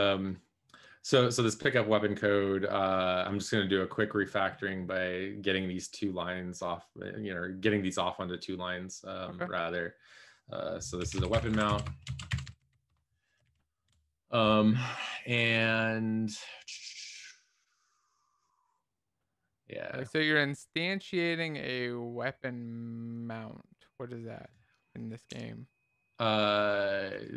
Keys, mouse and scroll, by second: 11.4-13.2 typing, 13.4 ctrl+s, 13.8 Down.